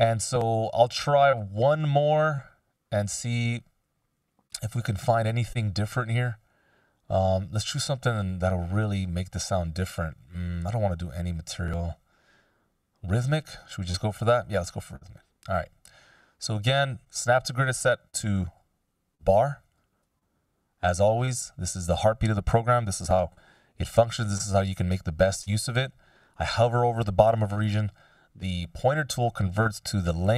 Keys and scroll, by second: 23.7 F16.